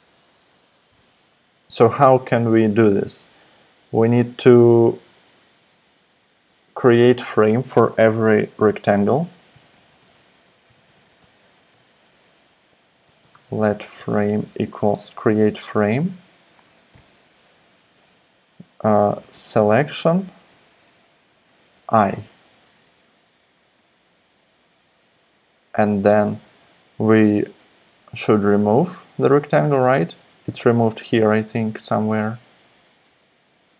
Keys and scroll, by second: 9.3-11.7 typing, 12.7-15.4 typing, 16.7-17.4 typing, 18.9-20.2 typing, 20.5 Left, 21.7 i.